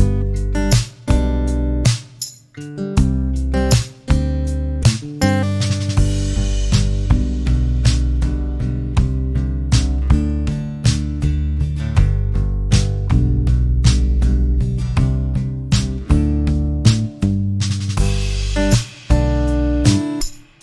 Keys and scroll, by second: 1.1 m, 5.0 0, 5.4 Return, 7.6 space, 9.9 m, 19.3 t.